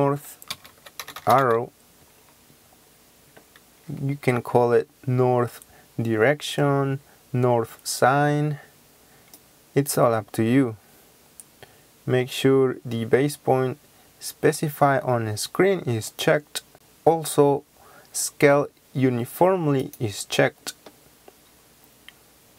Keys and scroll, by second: 0.0-1.4 typing.